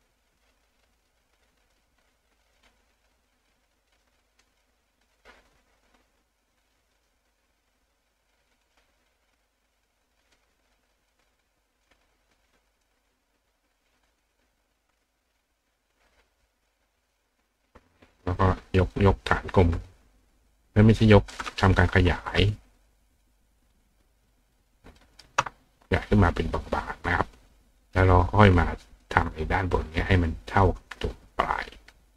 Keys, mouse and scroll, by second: 0.5 click, 1.7 click, 3.3-4.4 drag, 5.5 click, 7.8-8.8 drag, 10.4 click, 11.9-12.9 drag, 14.2 click, 16.1 click, 18.4-21.3 drag, 23.6-25.2 shift+drag, 25.0 shift+right click, 27.9 click, 28.6 click, 30.7 click, 31.6 click.